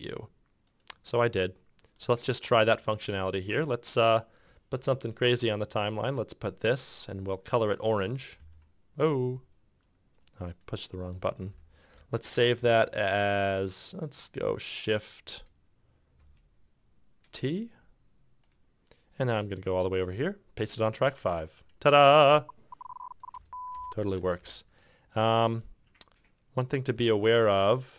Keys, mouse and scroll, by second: 3.7 f, 8.5 KP_3, 10.5 f, 20.2 t, 22.1 f, 23.5 space, 23.9 space, 24.4 g, 24.5 g, 27.1 f, 27.6 f.